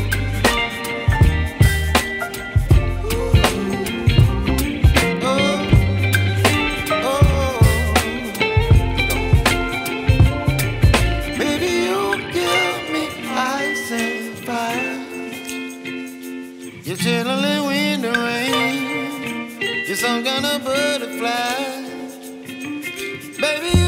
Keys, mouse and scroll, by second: 3.9 middle click, 5.4 double click, 8.7 double click, 19.2 double click.